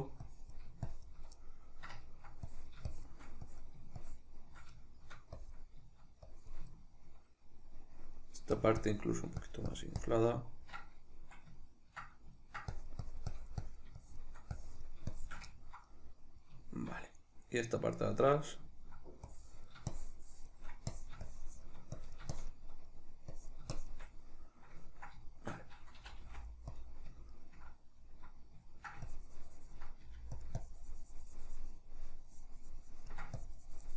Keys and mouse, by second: 0.4-1.5 drag, 1.5-2.6 middle drag, 2.6-5.0 drag, 5.0 shift+middle click, 5.6-6.9 drag, 6.9-8.7 shift+middle drag, 8.7-10.6 drag, 10.6-12.9 middle drag, 12.9-15.7 drag, 15.7-19.5 ctrl+middle drag, 19.5-23.0 drag, 23.0 middle click, 23.5 click, 24.2-27.0 middle drag, 26.1 c, 27.0 click, 27.0-29.2 middle drag, 29.2-30.5 ctrl+drag, 30.1 f, 30.7-33.9 ctrl+drag.